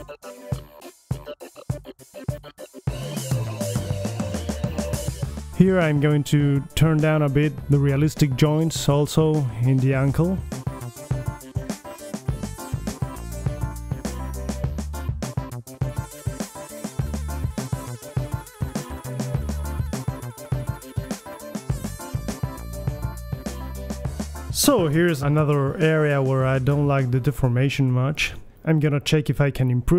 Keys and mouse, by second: 0.6 right click, 0.7-1.1 middle drag, 0.9 r, 1.2 middle click, 2.4-3.0 middle drag, 2.5 r, 6.9 click, 7.4 right click, 8.1 click, 8.6 middle click, 9.4 right drag, 9.9 right click, 10.2 click, 10.3 middle click, 10.4-11.3 right drag, 11.8 click, 12.7 ctrl+z, 12.7 click, 13.3 click, 14.2-14.9 right drag, 14.6 r, 17.0 click, 17.1 middle click, 17.9 middle click, 19.3 r, 20.6 click, 20.9 BackSpace, 21.5 middle click, 23.7-24.9 middle drag, 24.4 g, 25.7 g, 26.3 drag, 27.4 click, 27.8 middle click, 28.1 right click, 28.6-29.9 middle drag.